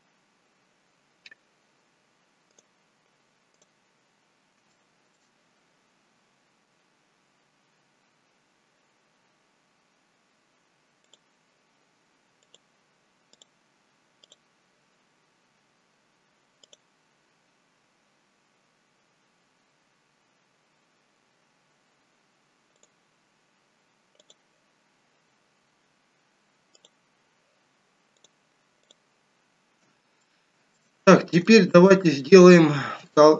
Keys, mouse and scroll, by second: 2.5 click, 4.2-4.9 scroll up 2, 4.7 shift+middle click, 11.1 click, 13.3 click, 16.5 click, 22.8 click, 26.8 click, 28.1 click, 30.2 shift+middle click, 31.5 shift+middle click, 33.1 shift+middle click.